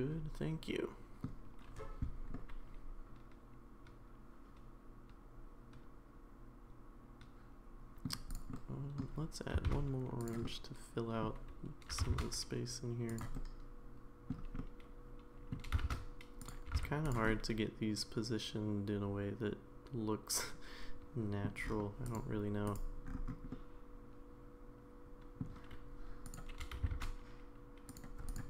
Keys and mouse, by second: 2.3-8.0 middle drag, 8.3 click, 8.5-9.0 middle drag, 9.7 shift+d, 10.4 middle click, 11.9 g, 13.4-14.3 middle drag, 14.6-15.5 middle drag, 15.7 g, 16.7 g, 17.3-21.4 middle drag, 22.1 click, 23.5-25.4 middle drag, 26.6 g.